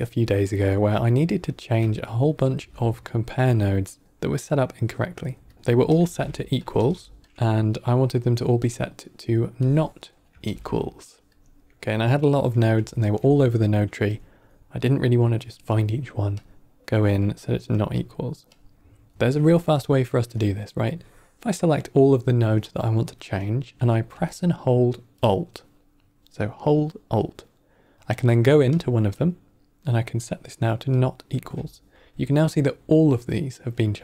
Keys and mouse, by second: 0.4 middle click, 0.9 click, 1.7-2.2 drag, 2.5 shift+d, 5.4 click, 5.5 x, 5.8 shift+click, 6.0 shift+d, 6.6 shift+d, 7.2 click, 7.2 ctrl+middle click, 7.2 shift+d, 8.5-9.2 drag, 9.5 click, 10.3 shift+d, 11.6 middle click, 12.3 middle click, 12.9 ctrl+middle click, 13.4 middle click, 14.0 click, 16.3-17.2 drag, 17.9-18.5 drag, 20.8-21.8 drag, 28.6-30.9 alt+drag.